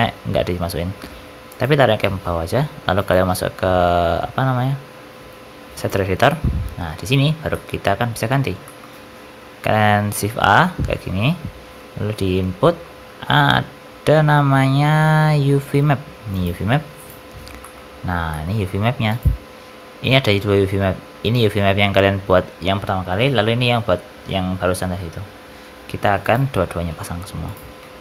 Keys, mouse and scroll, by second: 2.9 click, 6.2 middle click, 6.6-7.4 scroll down 21, 7.4 middle click, 8.3-8.6 scroll up 5, 8.6 middle click, 10.3 shift+a, 17.2-18.0 scroll up 9, 17.5 middle click, 18.2 middle click, 18.5-20.4 scroll up 3, 19.0 click, 27.4 click, 27.7 shift+d.